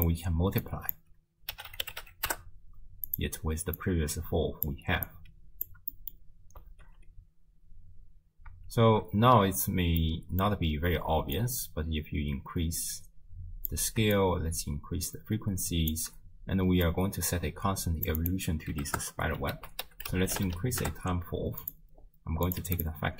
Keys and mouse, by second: 0.0 click, 0.7-3.1 drag, 3.8-4.7 drag, 5.1-5.7 drag, 6.0 middle click, 6.7 shift+space, 8.7 shift+space, 9.3 space, 10.0 middle click, 11.4-13.7 drag, 14.2-16.0 shift+drag, 16.9-18.1 drag, 18.2 click, 19.6 ctrl+a, 22.5 click.